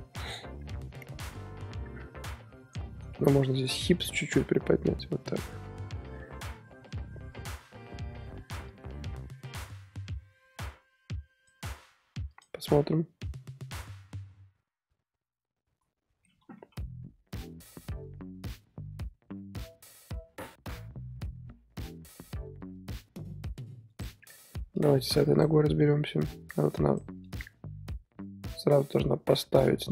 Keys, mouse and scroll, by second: 3.5 click, 4.1 g, 8.7-12.6 drag, 12.6 scroll down 1, 12.7-16.2 middle drag, 16.2 scroll up 2, 16.5 KP_3, 23.9 click, 25.0 scroll up 2, 25.3 click, 26.3-29.9 drag.